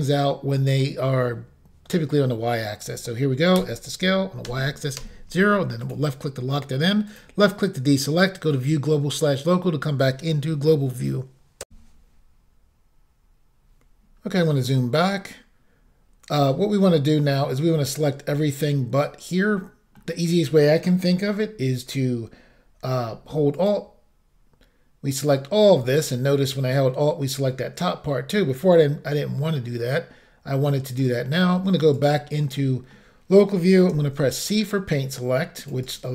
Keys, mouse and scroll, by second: 3.6 s, 4.5 y, 5.7 0, 5.9 click, 7.1 click, 8.5 click, 11.7 Insert, 13.7-14.1 scroll up 1, 14.1-14.6 scroll down 2, 14.8 middle click, 16.8 middle click, 17.1 scroll up 1, 17.9-18.4 scroll down 1, 19.6 middle click, 23.6 alt+click, 26.0 middle click, 27.7 middle click, 32.0 click, 32.7 middle click, 34.0 c, 34.4 click, 35.9 right click.